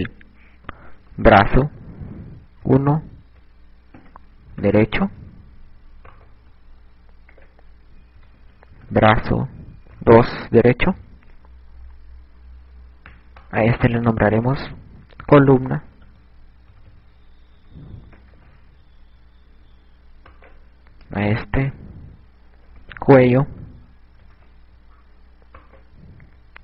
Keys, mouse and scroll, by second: 0.8 click, 7.1 right click, 8.3 click, 13.8 right click, 15.2 click, 20.9 right click, 22.0 click, 26.2 right click.